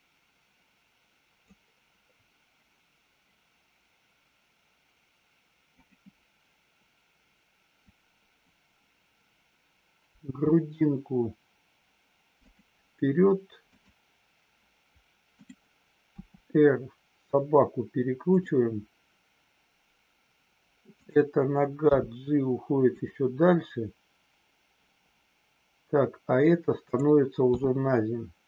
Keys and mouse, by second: 5.8-6.4 drag, 7.9-8.4 drag, 12.4 click, 15.2-15.9 drag, 16.1 r, 18.3 click, 20.9 click, 21.9 g, 22.9 click, 26.8 click, 27.5 g.